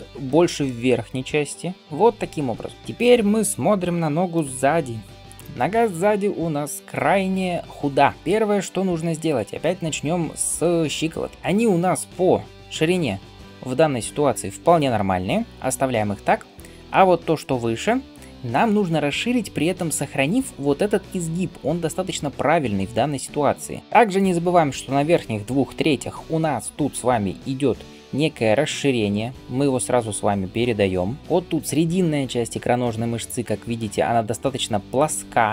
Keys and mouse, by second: 2.7 d, 5.5 ctrl+KP_1, 23.8-24.9 drag, 23.8-25.2 d, 31.2 f.